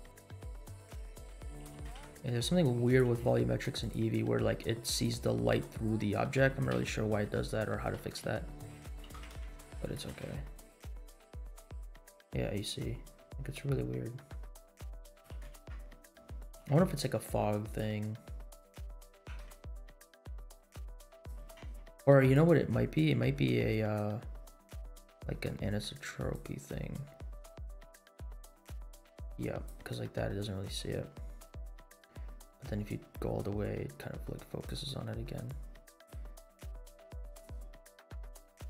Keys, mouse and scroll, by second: 1.6 g, 3.0 g, 3.9 r, 5.3 middle click, 5.8 scroll up 2, 6.7 KP_Decimal, 7.3 scroll down 2, 7.6 middle click, 8.0 r, 8.9 g, 10.0 g, 15.2 g, 16.5 g, 18.0-18.5 middle drag, 18.6 scroll down 2, 19.0 g, 21.4 g, 24.7 click, 26.1 click, 27.8-29.8 drag, 30.0-30.7 scroll down 4, 31.7-34.8 drag, 35.4 click, 36.9 click, 37.8 click.